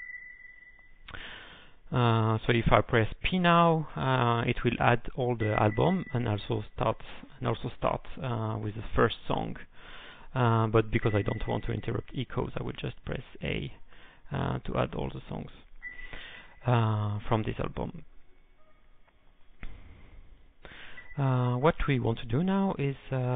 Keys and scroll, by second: 0.3 Return, 13.5-14.2 typing, 22.7-23.3 typing.